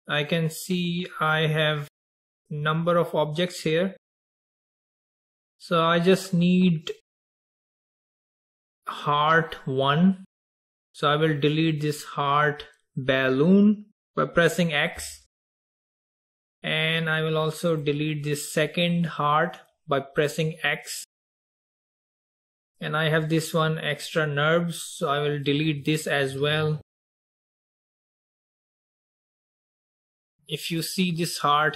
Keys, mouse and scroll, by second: 1.2 click, 2.3 click, 4.1 drag, 5.3 click, 7.1 click, 8.3 click, 11.4 click, 15.1 x, 17.8 click, 21.2 x, 22.6 click, 26.4 x, 28.3-28.8 scroll up 1, 30.2-31.0 shift+middle drag, 31.0-31.3 scroll up 2.